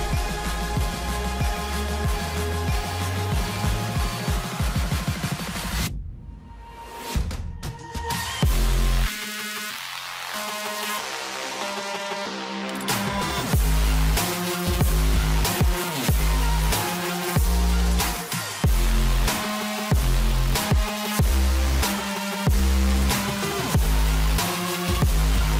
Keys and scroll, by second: 0.0 ctrl+u, 17.7 ctrl+g.